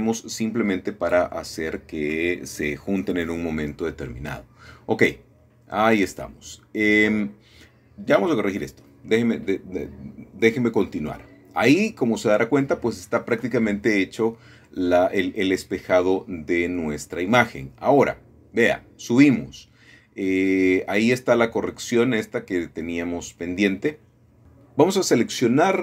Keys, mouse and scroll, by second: 1.0-1.8 scroll up 1, 2.1 ctrl+r, 2.6 click, 4.2 click, 4.4 middle click, 6.1-7.9 scroll down 3, 6.9-7.9 middle drag, 10.7 middle click, 10.7-11.4 scroll up 2, 11.7-12.9 scroll down 2, 13.0-14.0 scroll up 2, 15.8-17.2 drag, 18.6-19.6 scroll down 2, 19.6 middle click, 20.8-22.1 middle drag, 21.2-22.1 scroll down 1, 22.7 middle click, 23.1-23.6 scroll up 1, 24.2 shift+middle click.